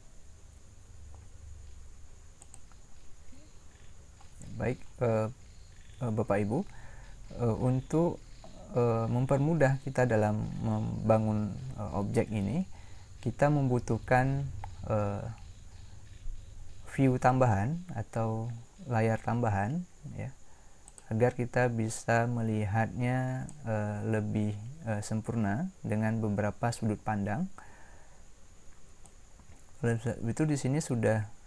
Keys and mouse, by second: 20.8-25.7 drag, 29.0 click.